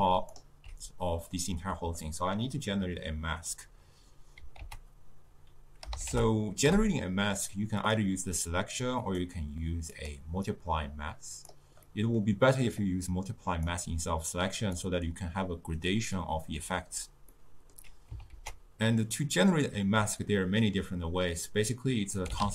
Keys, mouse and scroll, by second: 10.1-14.8 drag.